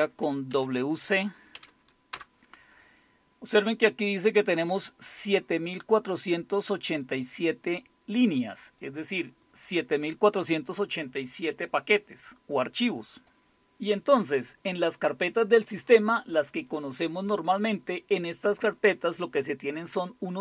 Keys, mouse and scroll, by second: 0.0-0.5 typing, 1.5-2.1 typing, 6.0-7.1 drag, 8.7 click, 13.0 click.